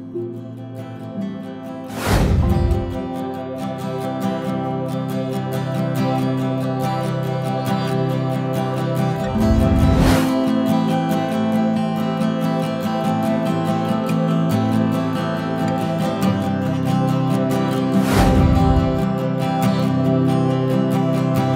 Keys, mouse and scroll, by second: 1.2-1.6 scroll up 2, 1.6 alt+a, 2.2 click, 5.5 alt+a, 5.9-6.2 scroll down 1, 6.2 Tab, 8.0 Tab, 9.0 i, 10.3 shift+d, 13.9 click, 16.6 click, 20.2 click.